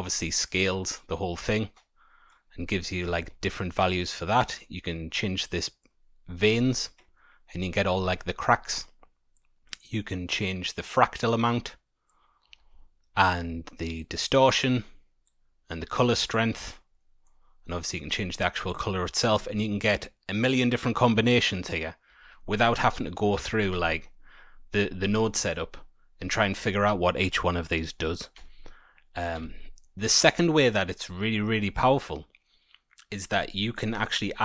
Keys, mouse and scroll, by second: 3.4 ctrl+z, 4.4 click, 7.0-7.5 scroll up 6, 8.1-8.8 scroll down 6, 9.3 click, 10.4 click, 12.7 ctrl+z, 13.9 click, 15.2 click, 16.3 click, 17.0 middle click, 17.3-17.8 scroll down 1, 17.8 click, 17.8-19.2 scroll down 1, 22.6 middle click, 23.0-23.4 scroll down 1, 23.4 click, 23.7 Tab, 24.2-24.8 scroll down 7, 24.8 middle click, 25.6-26.0 scroll down 3, 26.2 scroll up 2, 28.3 Tab, 29.3 a, 30.2-31.3 scroll up 3, 31.3-32.3 scroll up 1, 33.4 middle click, 34.3 click.